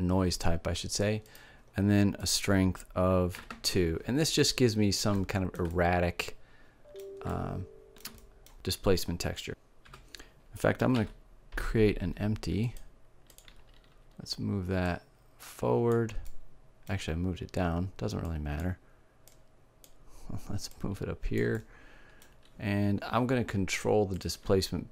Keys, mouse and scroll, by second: 1.0-4.1 drag, 4.1-8.5 middle drag, 10.5 shift+a, 14.3-15.8 drag, 15.8 middle click, 17.7-21.0 drag, 21.0 middle click, 21.4 click, 22.1 middle click, 23.6-24.9 drag.